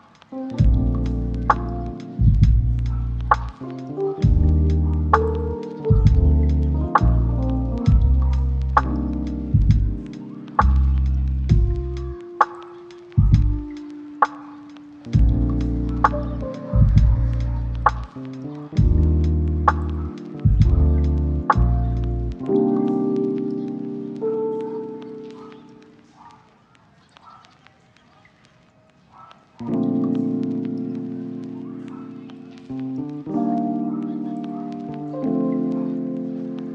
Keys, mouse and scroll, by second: 6.1 middle click, 6.8 ctrl+middle click, 7.7 shift+middle click, 8.3 middle click, 9.0 ctrl+middle click, 12.8 middle click, 15.2 middle click, 16.4 middle click, 17.5 ctrl+middle click, 18.4 right click, 19.7 4, 19.8 Return, 20.5 shift+middle click, 21.3 ctrl+middle click, 22.3 shift+middle click, 22.8 double click, 28.9 right click, 32.9 double click, 36.6 middle click.